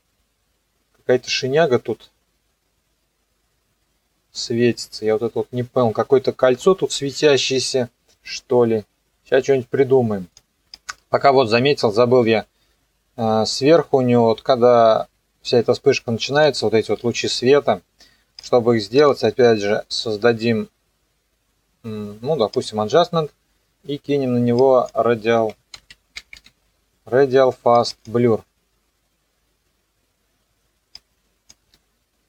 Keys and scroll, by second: 25.2-26.9 typing.